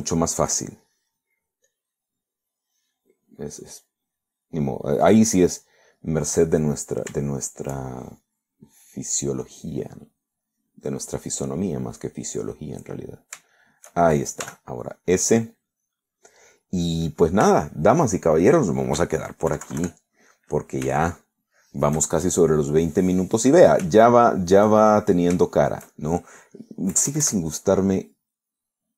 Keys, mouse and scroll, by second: 0.7 shift+middle click, 1.1 shift+middle click, 2.7 click, 3.6 click, 4.7 click, 5.2 click, 5.6 click, 8.3 shift+middle click, 9.7 click, 10.5 click, 11.5 click, 13.1-14.1 drag, 14.2 shift+middle click, 14.8 shift+middle click, 15.5 s, 15.9-17.5 drag, 18.0 middle click, 18.7 shift+middle click, 19.2 shift+middle click, 20.6 KP_Subtract, 21.4-22.9 middle drag, 25.1 shift+middle click, 25.9-27.3 shift+middle drag, 27.6 middle click, 28.0 KP_Add.